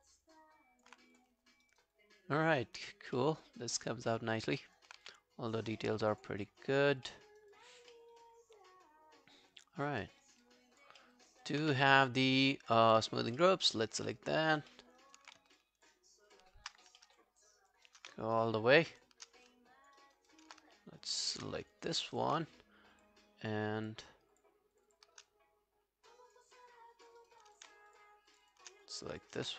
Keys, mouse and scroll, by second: 1.7 alt+right click, 2.0 alt+click, 3.2 alt+middle click, 3.4 alt+right click, 3.8 alt+middle click, 4.1 alt+right click, 4.3 alt+scroll down 1, 4.6 alt+click, 5.0 q, 5.5 scroll down 2, 5.8 alt+middle click, 6.5 alt+scroll up 3, 6.7 alt+click, 7.1 alt+middle click, 7.3 alt+right click, 7.5 alt+click, 7.9 alt+middle click, 8.2 alt+right click, 8.4 alt+click, 10.1 alt+middle click, 10.3 alt+right click, 10.4 alt+click, 11.0 alt+middle click, 11.3 alt+right click, 11.6 q, 11.8 right click, 13.2 scroll up 1, 13.4 alt+middle click, 13.9 alt+scroll down 3, 14.1 alt+middle click, 14.5 alt+scroll up 2, 14.7 alt+middle click, 15.0 alt+right click, 15.5 shift+click, 15.5 alt+right click, 15.8 shift+click, 17.0 alt+middle click, 17.3 alt+scroll down 1, 17.5 alt+click, 17.9 alt+right click, 18.5 shift+click, 18.8 shift+click, 19.3 shift+scroll down 2, 19.5 alt+click, 20.0 alt+right click, 20.3 alt+click, 21.1 shift+click, 21.6 alt+click, 21.9 alt+right click, 22.1 alt+click, 23.0 shift+click, 23.5 shift+click, 25.3 alt+click, 26.6 alt+click, 27.2 alt+right click, 27.4 alt+click, 27.9 shift+click, 28.3 shift+click, 28.9 alt+click.